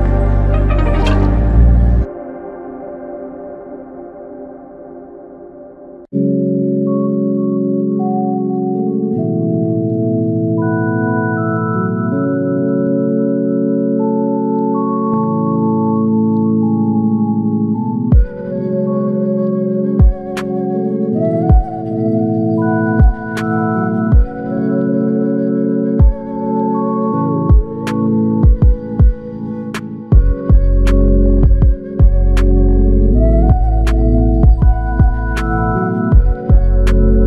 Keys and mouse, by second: 5.9 ctrl+i, 13.6 r, 16.7 typing, 24.5 ctrl+click, 26.8 alt+m, 28.4 shift+click, 32.6 typing, 35.4 double click.